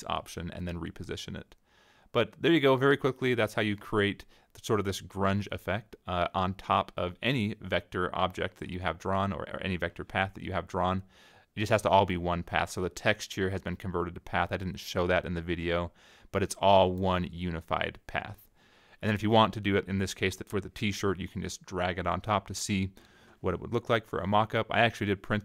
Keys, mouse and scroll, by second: 0.1 click, 1.0 click, 1.5 middle click, 1.9 click, 2.5 click, 3.2 click, 3.7-6.1 drag, 7.8-10.5 drag, 12.0-14.7 drag, 16.4-18.8 drag, 19.7 -, 20.6 click, 21.8-23.5 drag, 24.3-25.4 drag.